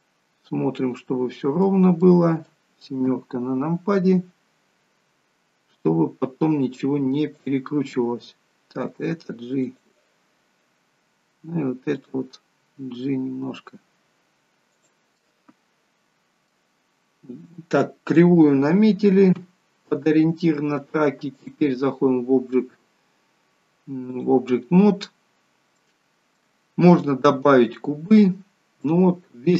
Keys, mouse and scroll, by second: 3.0 KP_7, 4.1 scroll down 1, 4.3-5.0 scroll down 3, 7.3 click, 8.8 g, 11.9 click, 12.6 g, 15.1 middle click, 19.3 KP_3, 21.3 click, 25.2-25.6 scroll up 2, 25.7 shift+middle click, 28.4 scroll down 1, 28.7 middle click.